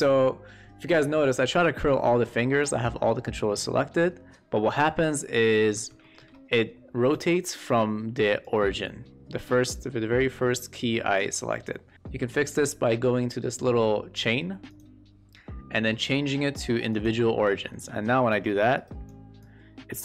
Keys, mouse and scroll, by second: 2.6-4.9 drag, 5.7 q, 6.0 shift+middle drag, 6.3 middle click, 7.1 e, 8.4-9.7 drag, 14.6 click, 17.7 shift+middle click, 18.2 click, 19.4-20.0 drag.